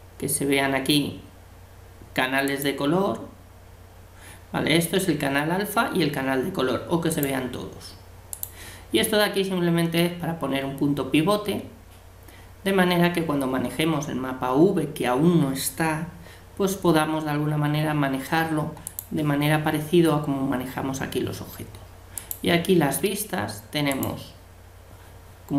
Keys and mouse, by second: 2.5-4.3 drag, 7.1-10.1 drag, 18.9-20.6 drag, 22.1-24.1 drag.